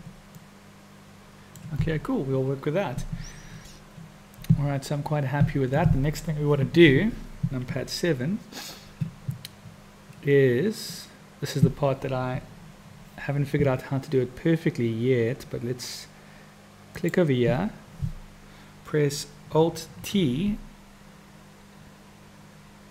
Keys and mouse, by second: 0.4-1.6 middle drag, 7.5 KP_7, 16.9 click, 19.9 alt+t.